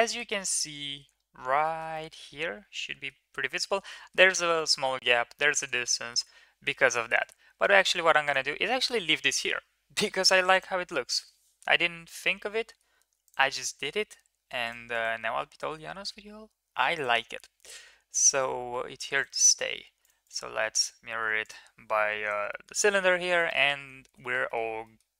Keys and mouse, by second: 0.1 middle drag, 0.8 middle drag, 1.6 middle click, 1.9-3.1 middle drag, 3.9 middle drag, 4.5 shift+middle drag, 4.9 middle click, 5.5 shift+middle click, 5.8 middle click, 7.0 ctrl+z, 7.6 middle click, 8.2 click, 8.8 middle click, 10.4 middle click, 11.6-12.8 middle drag, 14.6 click, 15.0-17.1 drag, 18.2 click, 20.2 click, 20.6-21.2 middle drag, 22.1 ctrl+s, 22.5 shift+middle click, 23.4 middle click, 23.8 ctrl+s, 24.2 middle drag, 24.5 middle drag, 24.8 middle drag.